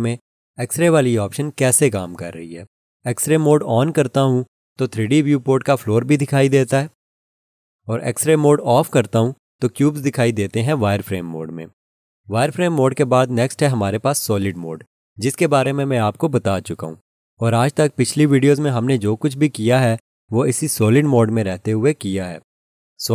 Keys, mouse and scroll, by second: 0.9 alt+z, 1.9 alt+z, 4.5 alt+z, 6.6 alt+z, 9.3 alt+z, 15.6 click, 20.8 alt+click.